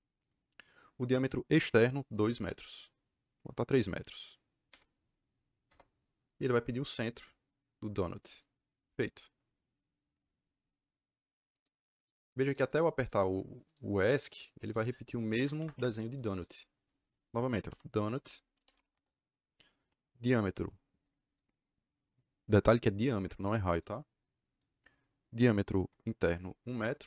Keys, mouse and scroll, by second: 4.6 KP_3, 5.6 KP_Enter, 8.2 click, 11.5 click, 12.1 click, 12.4 click, 12.6 click, 13.6 click, 13.9 click, 14.6 click, 15.5 Escape, 15.7 Escape, 17.6-19.1 typing, 26.5 KP_1, 26.6 KP_Enter.